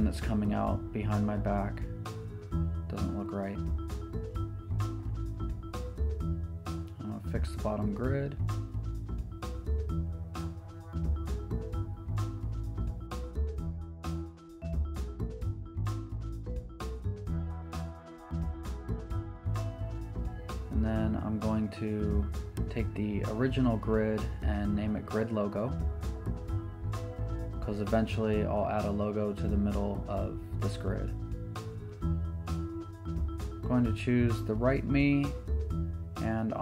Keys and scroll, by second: 0.3-0.7 typing, 3.8-5.7 typing, 6.2 Return, 9.3 super+t, 20.1 Return, 25.0 Escape, 25.7 Right, 26.4 Return, 27.7 shift+Left, 28.2 shift+Down, 29.5 Right.